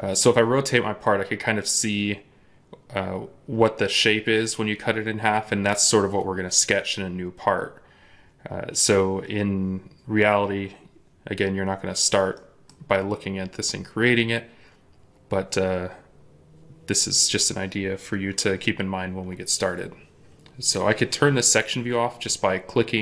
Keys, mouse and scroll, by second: 12.2 middle click.